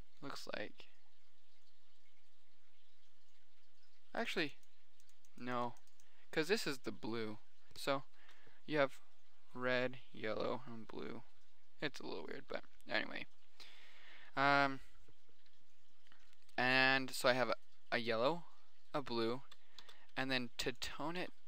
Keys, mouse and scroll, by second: 1.0 middle click, 14.8-15.6 middle drag, 16.0-17.8 middle drag, 18.4 middle click, 19.0 middle click, 20.0 shift+d, 20.8 click, 21.4 click.